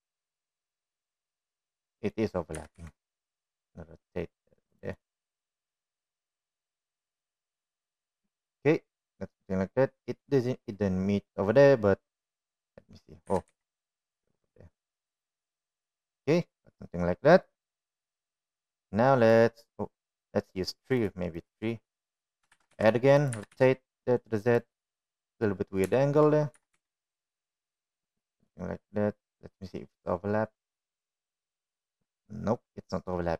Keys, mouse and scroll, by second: 0.1-3.1 middle drag, 3.5 r, 5.9-11.2 middle drag, 13.5-13.8 drag, 14.3 g, 17.2-19.0 middle drag, 20.4 click, 21.1 drag, 21.6 click, 22.5-23.1 drag, 23.6 shift+d, 24.4 r, 25.8 middle click, 27.0 shift+middle click, 27.6 r, 29.5-33.3 middle drag.